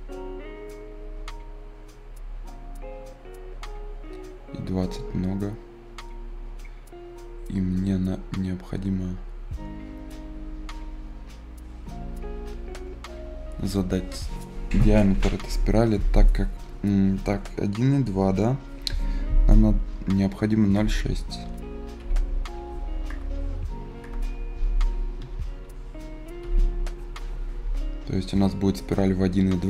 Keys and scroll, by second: 21.3 ï, 21.9 f, 23.0 BackSpace, 23.9 BackSpace, 25.1 s, 26.3 f.